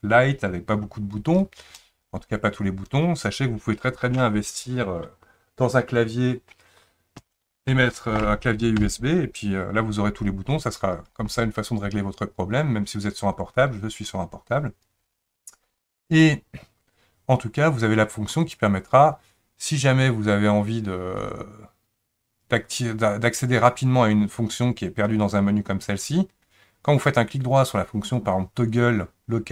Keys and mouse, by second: 18.5-29.5 drag.